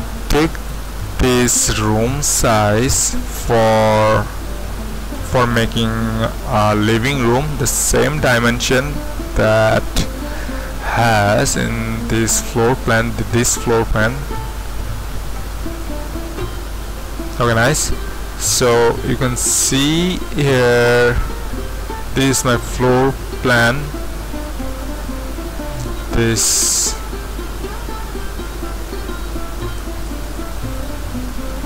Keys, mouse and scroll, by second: 17.4-19.0 drag, 25.8-26.9 drag, 29.8-30.2 typing, 30.7 click.